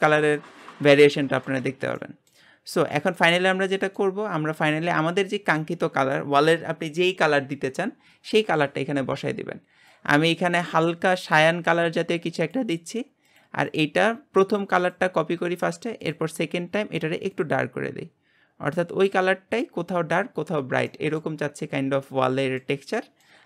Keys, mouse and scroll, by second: 0.3-12.1 middle drag, 14.6 click, 17.3 click, 20.2-20.9 scroll down 7, 20.9 middle click, 21.4-22.1 scroll up 4, 22.1-23.4 middle drag.